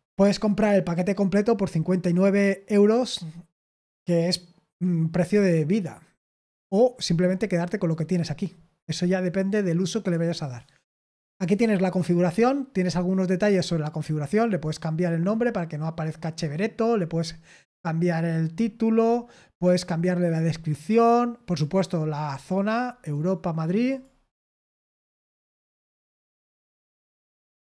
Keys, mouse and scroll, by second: 3.6-6.0 scroll down 2, 6.6-7.8 scroll up 2, 7.8 click, 11.1 click, 18.9-21.2 scroll down 1, 21.4 click, 22.2-23.1 scroll down 2, 23.1 click, 23.4 click, 23.8 click, 24.4-26.2 scroll down 2, 26.2 click, 27.2-27.6 scroll down 2.